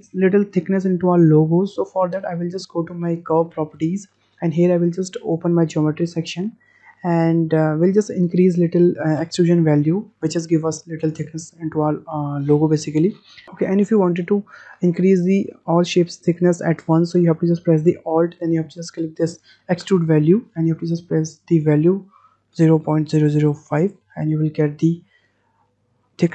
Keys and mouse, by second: 3.7 click, 6.1 click, 19.8-24.5 alt+drag, 25.2-26.3 middle drag.